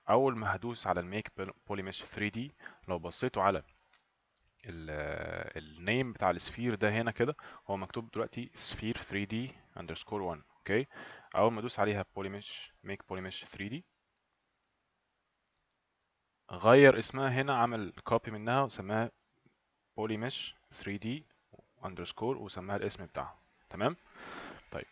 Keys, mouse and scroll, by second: 19.0 click, 21.2 click, 23.2 click.